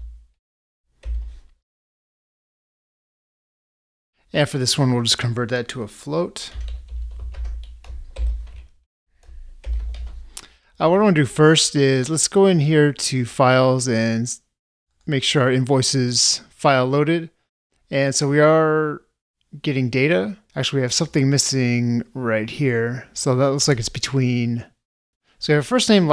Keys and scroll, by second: 8.3 ctrl+space.